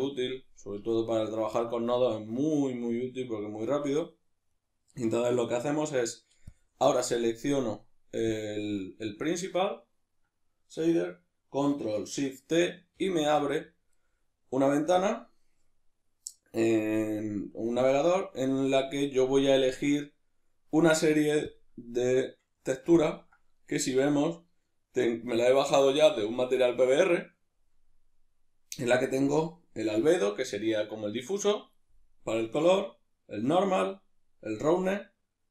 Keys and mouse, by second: 1.0-4.5 ctrl+middle drag, 4.5 right click, 6.5-35.5 drag, 13.0 ctrl+shift+t.